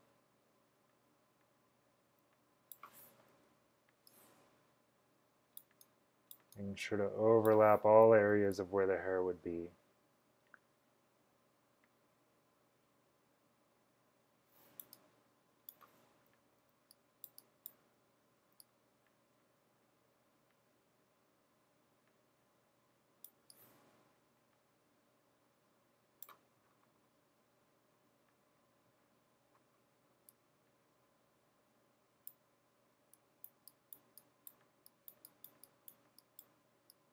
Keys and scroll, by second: 3.4-3.7 typing, 7.9-8.7 typing, 16.2-16.9 typing, 18.0-18.7 typing.